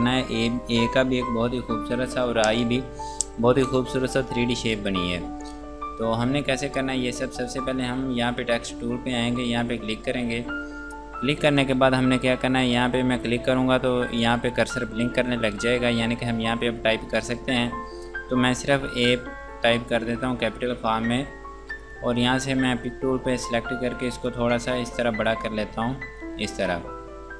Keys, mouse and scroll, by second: 9.6 click, 12.6 click, 18.8 a, 21.7 click, 24.2 click, 25.4 click, 26.7 click.